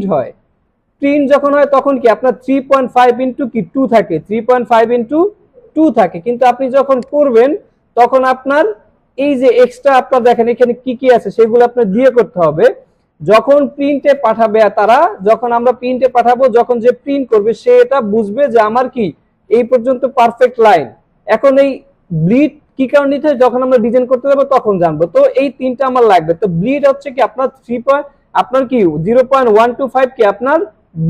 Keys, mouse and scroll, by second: 2.1 click, 2.5 click, 6.0 click, 6.9 click, 12.5 click.